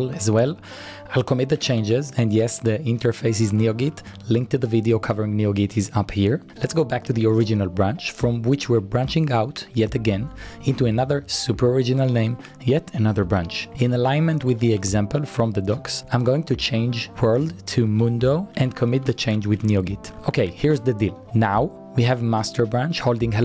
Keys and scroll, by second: 0.0-4.7 typing, 7.2 shift+z, 8.4-10.9 typing, 12.8 Return, 14.1 Return, 14.1-15.6 typing, 16.8-20.7 typing.